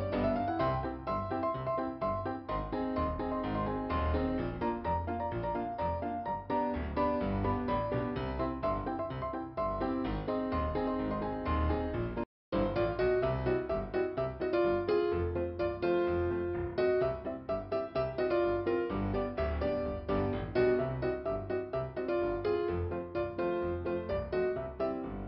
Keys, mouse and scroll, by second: 1.5 click, 3.4 click, 4.1 click, 4.2 click, 12.5 click, 13.0 middle click, 13.9 click, 15.1 click, 15.3 click, 18.4 scroll up 2, 21.0 scroll down 2, 24.4 scroll down 2.